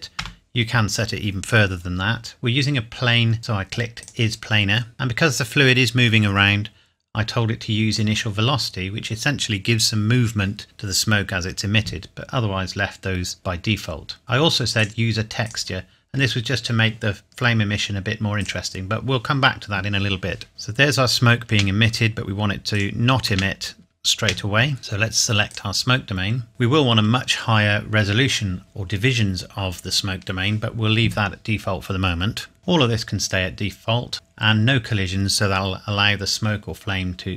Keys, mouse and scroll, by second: 0.1 KP_Enter, 0.8 KP_Enter, 4.0 click, 4.9 scroll down 1, 7.1-7.9 scroll down 1, 7.9 click, 8.4-10.6 scroll down 1, 13.6 scroll down 1, 14.8-15.4 scroll down 1, 15.4 click, 16.3-16.8 scroll down 1, 18.5 click, 20.5 space, 21.4 space, 22.7 click, 23.2 space, 24.8 ctrl+s, 25.5 click, 26.5-27.6 scroll up 1, 33.6 scroll down 1.